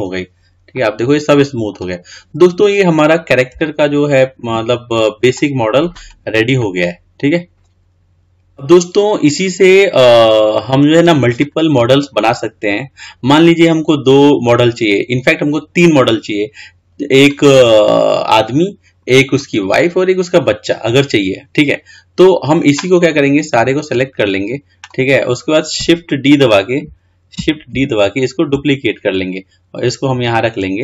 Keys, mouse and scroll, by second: 0.9-5.0 middle drag, 5.0-5.6 scroll down 1, 5.6 middle click, 6.2 click, 6.9-8.3 middle drag, 23.4 click, 28.0 shift+d.